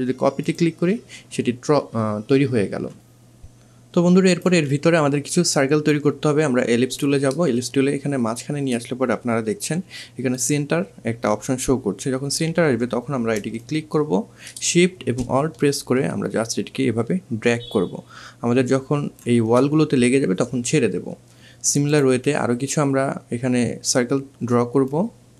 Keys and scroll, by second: 9.7 2, 12.5 2.